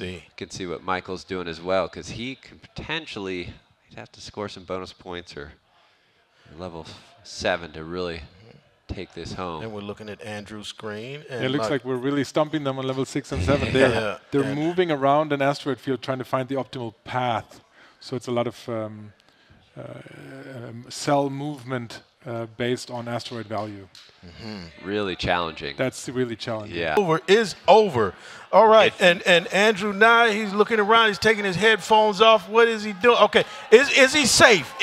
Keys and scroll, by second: 0.1 Page_Down.